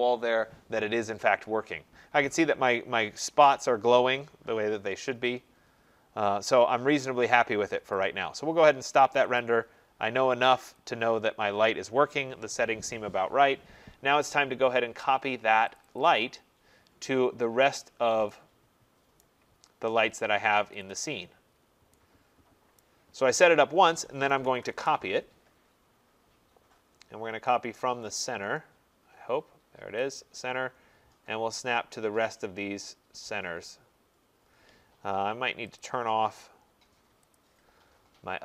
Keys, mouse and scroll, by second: 7.9 click, 9.4 click, 10.9 click, 16.0 click, 19.2 right click, 19.6 middle click, 19.6 middle click, 20.8 click, 21.0 click, 21.6 middle click, 21.7 middle click, 22.8 right click, 24.1-25.0 typing, 24.7-25.5 scroll, 25.5 middle click, 25.7 middle click, 25.9 middle click, 30.2 click, 35.8 click, 37.4 click.